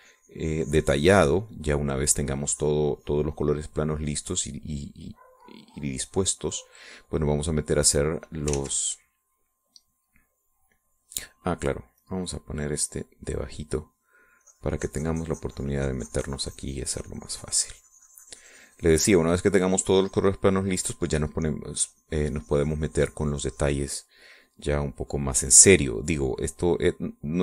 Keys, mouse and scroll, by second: 2.6-3.7 middle drag, 3.7-7.9 drag, 8.3 click, 8.6 middle click, 8.9 click, 9.6 ctrl+middle click, 9.7 ctrl+z, 13.2-14.7 drag, 15.6-22.2 drag, 22.4 middle click, 23.0-27.4 drag.